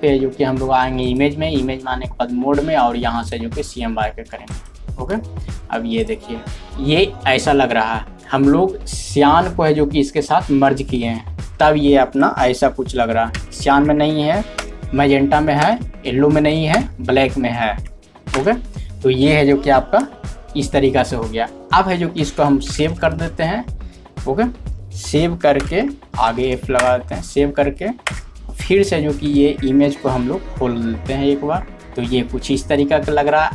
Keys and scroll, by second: 3.6 typing, 13.4 ctrl+3, 14.6 ctrl+4, 15.6 ctrl+5, 16.7 ctrl+6, 22.7 alt+e.